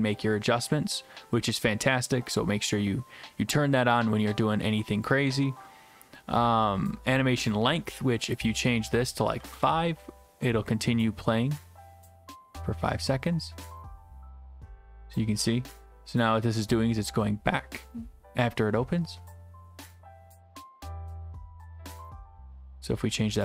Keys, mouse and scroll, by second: 8.4 click, 9.4 5, 9.5 Return, 22.7 click.